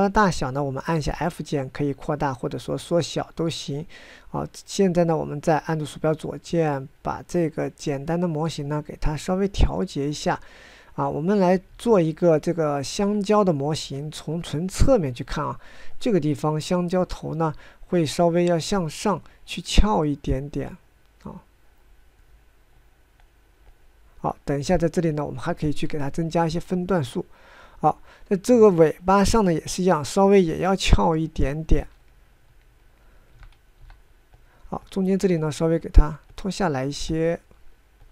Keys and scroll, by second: 34.2 f.